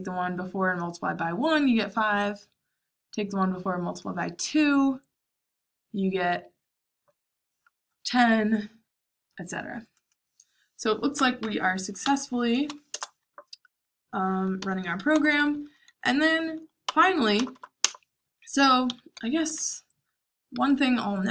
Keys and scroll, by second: 11.1 Page_Up, 11.3 Page_Up, 12.0 Page_Up, 12.8 Return, 14.3-17.7 typing, 18.8 Escape, 19.5-21.3 typing.